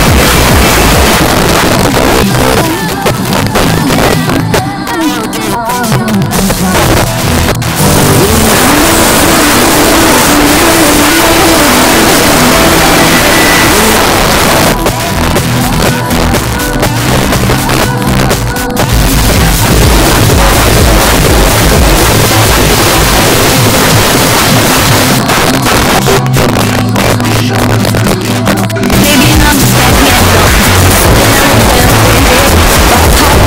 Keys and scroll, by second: 1.2 Page_Down, 13.9 Page_Down, 25.2 Page_Down.